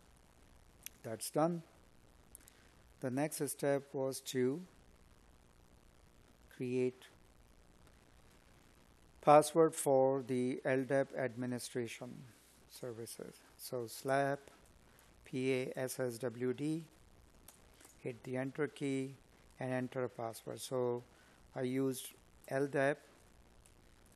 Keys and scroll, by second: 10.7 space.